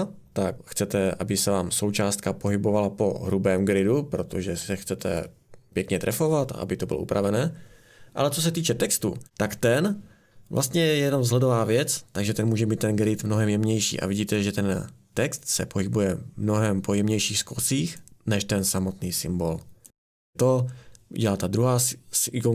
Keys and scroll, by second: 8.5 Escape.